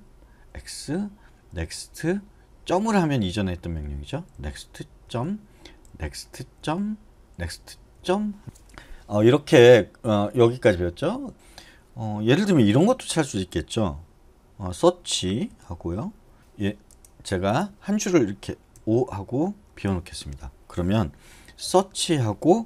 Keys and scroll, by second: 0.4-7.8 typing, 15.5 /, 16.4 Escape, 18.7 o, 19.7 Escape, 21.6 /.